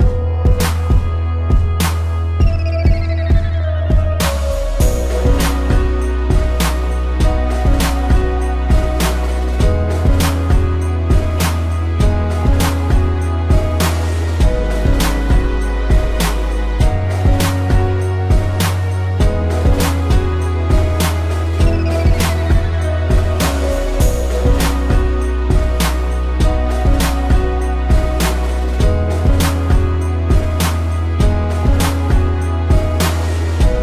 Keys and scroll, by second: 0.3 ctrl+=, 0.7 space, 3.8 ctrl+z, 6.4 space, 15.0 ctrl+z, 26.6 space, 31.3 space.